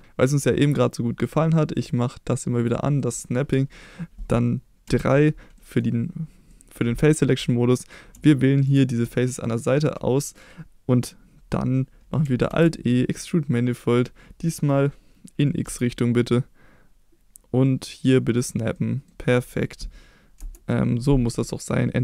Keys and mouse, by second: 2.6 click, 3.0 middle click, 4.9 3, 5.6 middle click, 6.5 middle click, 8.7 shift+click, 9.1 middle click, 12.5 alt+e, 15.6 x, 18.4 click, 18.7-19.1 middle drag, 20.4 Return.